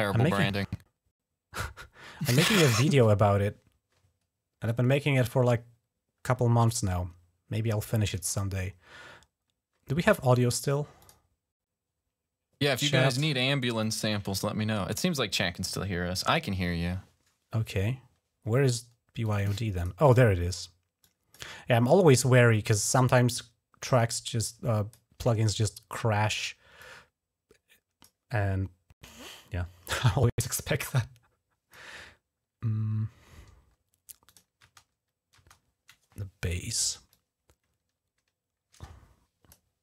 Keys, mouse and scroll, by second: 10.8 click, 13.6 click, 19.0 click, 19.6 click, 19.9 click, 20.8 click, 21.7 click, 23.9 click, 26.6-27.9 drag, 28.9-31.6 drag, 34.1 click, 34.4 space, 35.2 space, 36.7 typing, 36.9-39.3 drag.